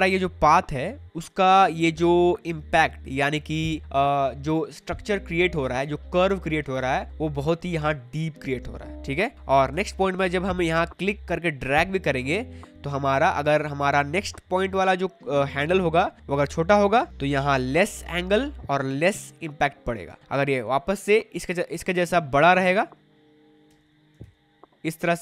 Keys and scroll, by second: 9.7 ctrl+z, 23.7 ctrl+z.